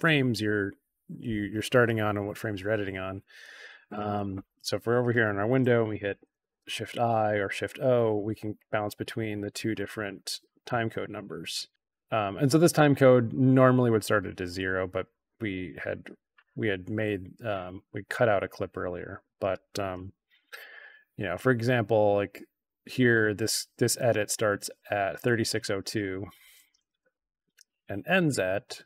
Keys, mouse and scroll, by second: 6.0 shift+i, 7.4-12.0 typing, 11.7-12.7 drag, 15.4-19.3 drag, 20.0 shift+i, 27.0 shift+o.